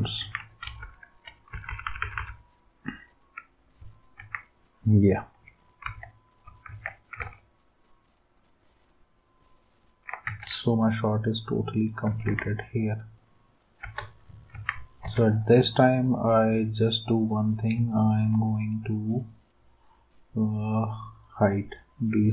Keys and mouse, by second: 0.2 ctrl+s, 0.8 Up, 1.5 Down, 1.7 Down, 1.8 Down, 2.0 Down, 2.1 Down, 4.2 ctrl+s, 5.8 v, 6.7 ctrl+s, 10.3 ctrl+s, 12.3 ctrl+s, 13.8 space, 14.5 ctrl+s, 15.0 space.